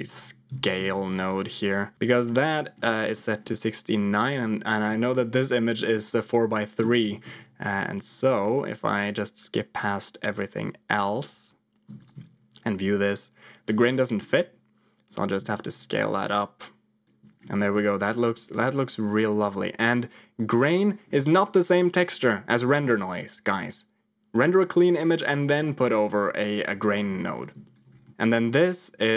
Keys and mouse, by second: 1.9 ctrl+z, 1.9 shift+d, 2.4 ctrl+click, 2.8 middle click, 3.8-4.8 drag, 5.8 middle click, 6.9 middle click, 8.7 click, 8.8-10.2 drag, 15.1-17.0 shift+drag, 17.4 middle click, 19.2-20.7 drag, 26.0 click, 27.1 click, 28.0 middle click, 28.2-29.1 drag.